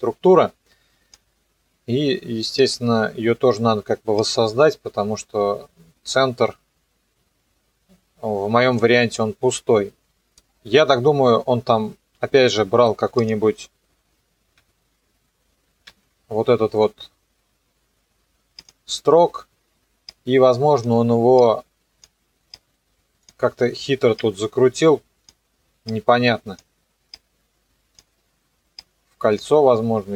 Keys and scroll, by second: 15.9 ctrl+d.